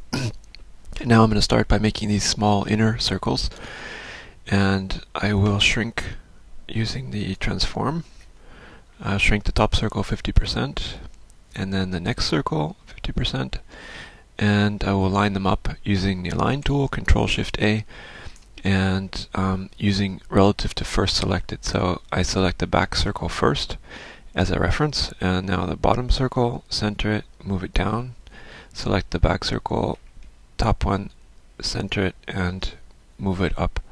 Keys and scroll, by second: 8.0 ctrl+shift+m, 18.5 ctrl+shift+a.